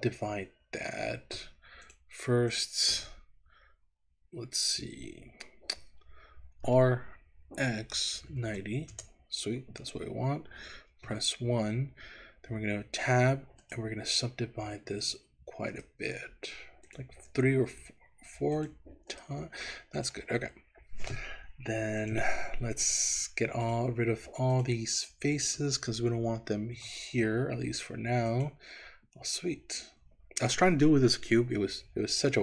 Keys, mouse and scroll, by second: 1.8 click, 2.5 click, 6.8 r, 7.7 x, 8.3 KP_9, 8.4 KP_0, 9.0 KP_Enter, 11.0 KP_1, 12.8 Tab, 13.7-15.3 right drag, 15.8-17.1 right drag, 17.3-18.9 right drag, 19.1 right click, 20.0 click, 20.6-22.1 scroll up 1, 22.1 click, 23.7 shift+click, 24.6 shift+click, 25.4 shift+click, 26.8 Delete, 29.4-30.6 middle drag, 32.3-32.4 middle drag.